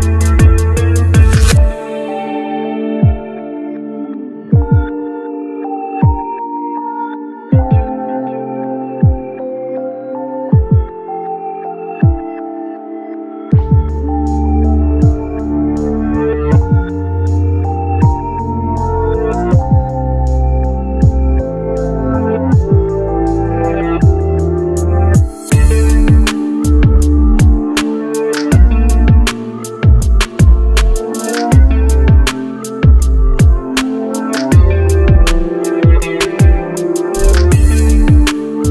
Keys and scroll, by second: 5.7 Tab, 6.2-7.7 typing, 13.8 1, 34.0 1.